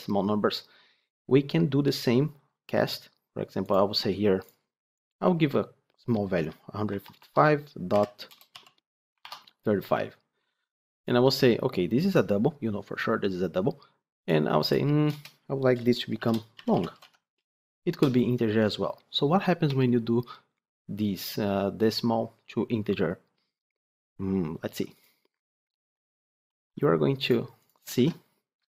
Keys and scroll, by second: 25.6 ctrl+c, 26.3 ctrl+d, 27.8 ctrl+v.